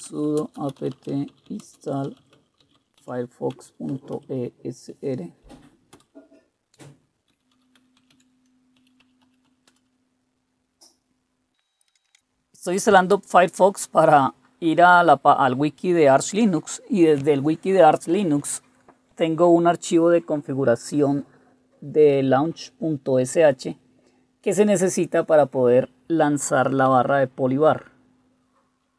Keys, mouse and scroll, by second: 0.0-5.1 typing, 6.1 typing, 7.2-10.1 typing, 11.9 Return.